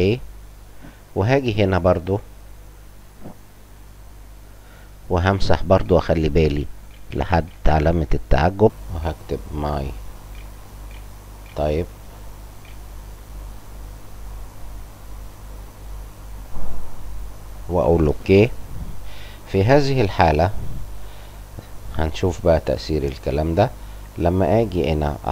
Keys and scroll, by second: 5.1-7.6 typing, 8.9 m, 10.3 y, 10.8 t, 11.2 y, 12.5 p, 13.0 [.